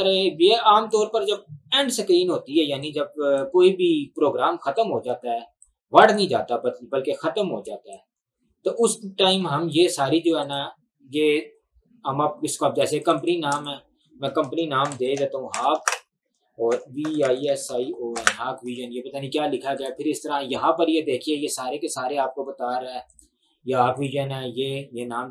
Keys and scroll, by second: 14.6-18.8 typing.